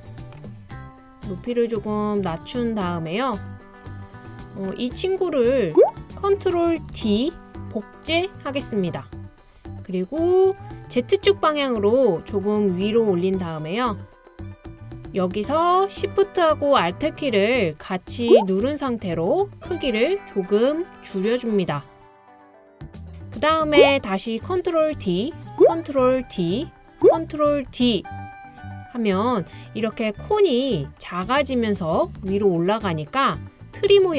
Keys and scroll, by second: 7.2 super+d, 25.0 super+d, 26.2 super+d, 27.7 super+d.